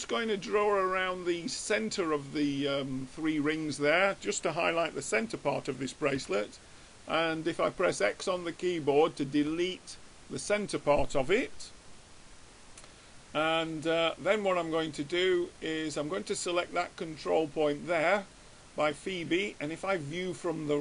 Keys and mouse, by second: 6.4 x, 12.2-13.9 middle drag, 15.3-17.0 drag, 16.4-18.0 middle drag, 16.4 right click, 20.4-20.8 drag.